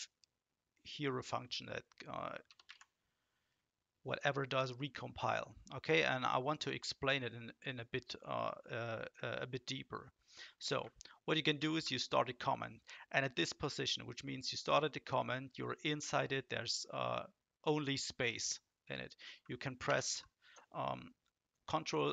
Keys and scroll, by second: 2.4 Return, 2.6 Up, 11.6 ctrl+shift+?, 19.8 ctrl+space.